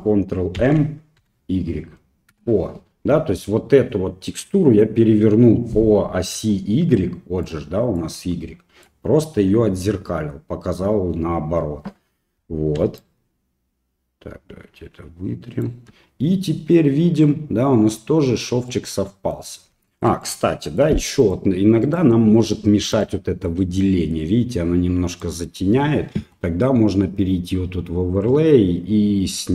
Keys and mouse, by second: 0.6 ctrl+m, 6.3-9.4 d, 6.5 click, 7.5 click, 8.2 click, 12.7-15.9 d, 13.0-15.6 right drag, 18.7 middle click, 19.9 shift+middle click, 20.2 middle click, 21.2 right click, 21.8 right click, 22.4 right click, 22.9 right click, 23.8 middle click, 25.2 middle click, 28.1-29.5 right drag.